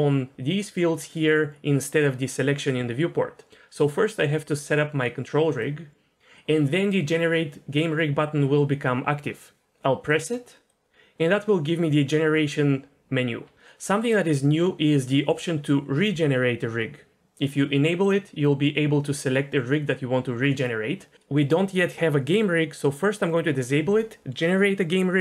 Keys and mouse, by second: 4.0-5.6 drag, 10.1-25.2 drag.